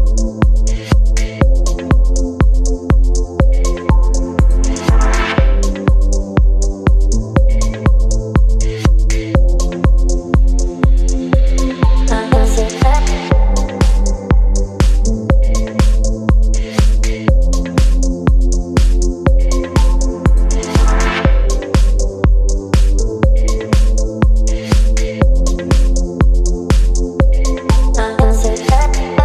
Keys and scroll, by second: 0.6 Return, 0.8 Left, 1.2 Down, 1.4 Down, 1.4 Down, 1.5 Down, 2.8 Down, 2.9 Down, 3.7 Right, 4.5 space, 10.0-11.3 typing, 11.3 ctrl+a, 17.6 KP_9, 17.7 Return, 20.9-27.0 typing, 27.8 ctrl+a.